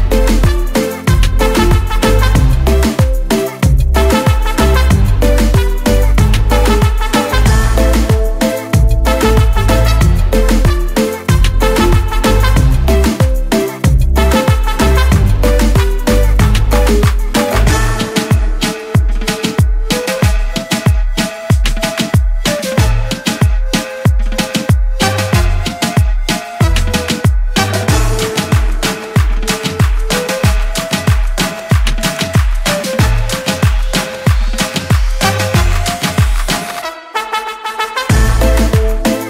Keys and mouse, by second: 1.1 click, 1.4 click, 4.1 click, 6.5 click, 11.9 click, 13.2 double click, 14.8 click, 15.6 click, 17.2 click, 21.3 click, 25.1 click, 27.5 click, 28.4 click, 32.8 click, 36.0 click.